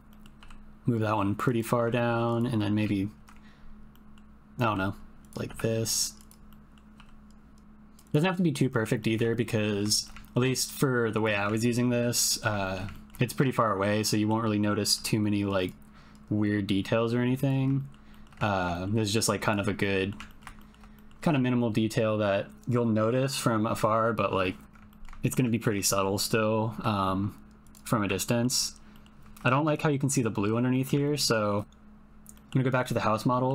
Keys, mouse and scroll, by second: 0.1 click, 0.4 g, 1.4 click, 2.1 shift+click, 2.3 click, 3.2 ctrl+l, 3.9 middle click, 4.6 g, 5.4 r, 6.5 middle click, 7.0 g, 7.6 g, 9.0 ctrl+middle click, 9.3 shift+middle click, 9.6 middle click, 9.9 shift+middle click, 10.3 ctrl+middle click, 10.6 shift+middle click, 12.0 ctrl+l, 12.2 middle click, 12.6 shift+middle click, 12.9 ctrl+middle click, 13.3 shift+middle click, 14.0 middle click, 14.8 g, 16.6 click, 17.7 shift+middle click, 18.1 shift+middle click, 18.4 ctrl+middle click, 18.7 shift+middle click, 19.8 click, 20.3 ctrl+click, 20.6 shift+click, 20.9 click, 24.6 ctrl+l, 24.8 ctrl+click, 25.2 shift+click, 25.5 ctrl+click, 25.6 ctrl+middle click, 25.9 shift+middle click, 26.2 middle click, 26.7 g, 28.2 ctrl+middle click, 30.7 middle click, 31.0 ctrl+middle click, 31.3 shift+middle click, 32.3 middle click, 33.3 middle click.